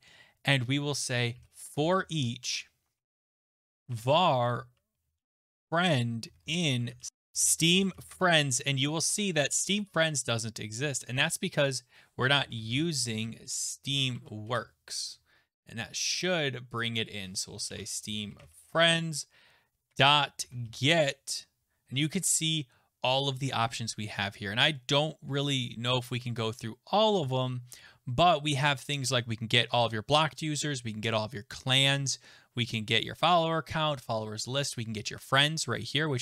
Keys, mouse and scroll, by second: 1.1-8.4 typing, 7.1 click, 7.1 scroll, 11.6 click, 12.1-14.3 typing, 16.0 click, 16.2 click, 16.8 click, 17.0 click, 17.2-21.1 typing, 23.8 scroll down 4, 24.0-24.7 scroll, 25.8-27.1 scroll.